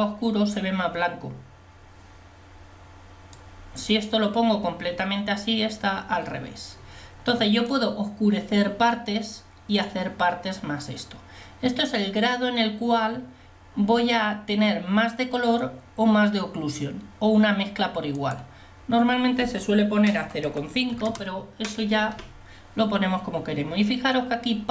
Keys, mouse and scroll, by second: 3.6 click.